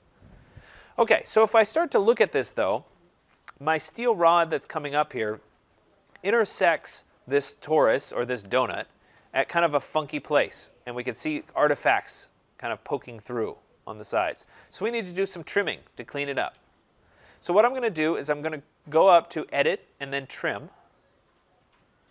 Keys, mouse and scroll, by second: 0.9 Escape, 1.2 Escape, 1.8 scroll up 2, 2.4-2.8 scroll up 1, 2.8 scroll down 2, 4.1 click, 5.6 middle click, 5.6-7.2 scroll, 7.3 click, 8.0-8.8 scroll, 8.8-9.5 scroll, 9.5-10.0 scroll, 10.0 scroll, 10.4 right click, 10.6 right click, 11.1-11.4 scroll, 14.5 scroll, 16.4 Escape, 17.1-18.2 scroll, 19.8 click.